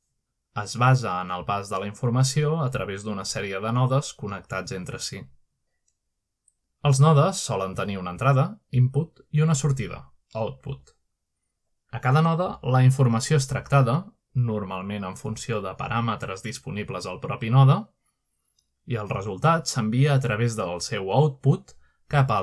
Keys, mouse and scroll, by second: 1.5-2.5 drag, 3.1 click, 4.2 click, 5.1-6.1 drag, 9.8 click, 10.6 click, 10.9 click, 11.2-12.1 scroll up 4, 12.0 middle click, 13.2 middle click, 16.6 middle click, 17.2 click, 18.6 click, 19.1 middle click.